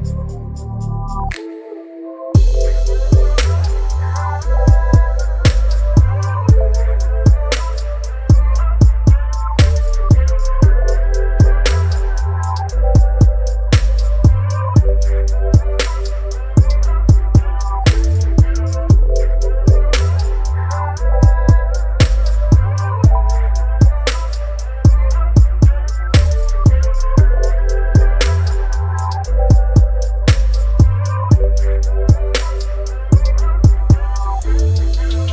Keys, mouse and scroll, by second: 5.2-17.3 alt+drag, 21.3 right click, 21.8 click, 25.9-29.9 drag, 34.8-35.3 alt+drag.